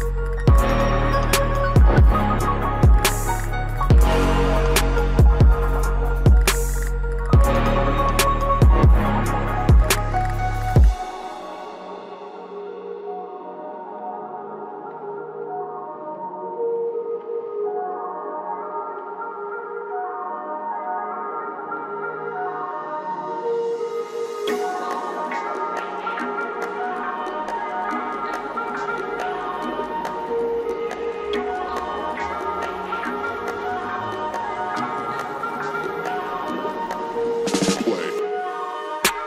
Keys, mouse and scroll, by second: 1.2-3.0 drag, 3.0-3.3 scroll down 1, 5.3-5.7 scroll up 1, 6.3 click, 7.6-8.0 scroll down 1, 8.7-9.5 scroll up 1, 9.5-14.3 drag, 14.3 scroll down 1, 16.3-18.0 drag, 18.8 click, 22.8 g, 23.4-25.4 drag, 25.4 typing, 29.3 click, 29.3 typing, 34.8-39.2 drag, 34.8 typing.